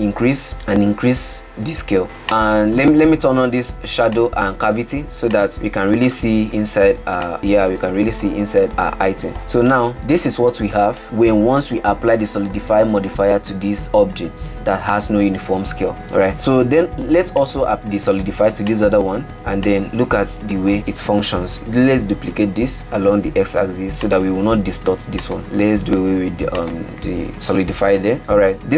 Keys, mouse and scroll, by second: 0.1-2.0 drag, 2.0 middle click, 2.5-5.5 drag, 6.6-7.8 drag, 7.8-9.1 middle drag, 9.1-9.8 scroll up 4, 9.8-16.4 middle drag, 16.4 click, 19.9-21.6 drag, 21.6 g, 22.3 shift+d, 25.4 click, 26.8 click, 27.3-28.4 shift+middle drag, 28.4-28.7 scroll up 1.